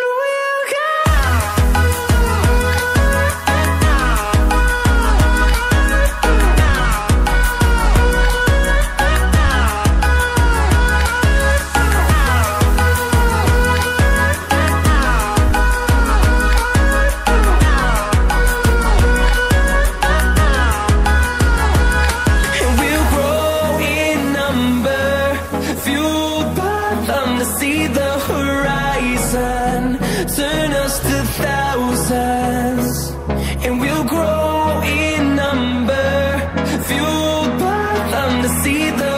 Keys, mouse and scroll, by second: 4.2-5.0 scroll up 1, 5.0 click, 6.3-7.4 scroll down 1, 7.4 click, 19.3 click, 23.8 double click, 27.8-28.3 scroll down 1, 29.6 click, 33.9 click, 35.1-36.4 typing, 37.1 click.